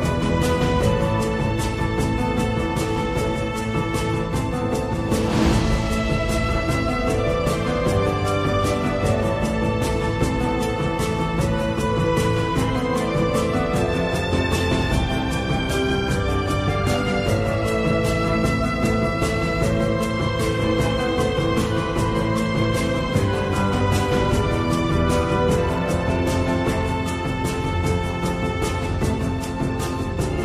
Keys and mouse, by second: 3.5 ctrl+z, 5.7 i, 11.0-12.4 drag, 12.7-14.6 drag, 16.4 click, 17.7 click, 18.4-19.7 drag, 22.4 Tab, 23.4-25.2 middle drag, 25.7 middle click, 26.2 Tab, 26.4 middle click, 28.2 click, 29.2 middle click.